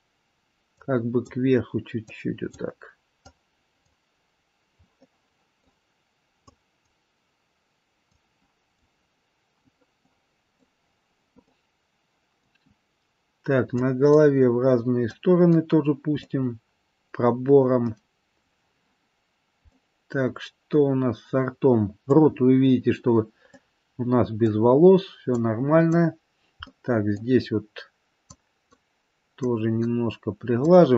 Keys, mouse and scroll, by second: 0.9 click, 2.2 click, 3.4 click, 4.9 middle click, 6.6 click, 8.2 click, 9.9 middle click, 10.9 scroll down 3, 11.4 middle click, 12.7-13.9 scroll up 3, 13.9 click, 15.3 click, 16.2 middle click, 17.8 middle click, 19.6 middle click, 22.3-22.6 scroll up 2, 23.5 middle click, 25.5 click, 26.6 middle click, 27.4-27.9 scroll down 1, 28.5 click, 29.6 click, 30.8 click.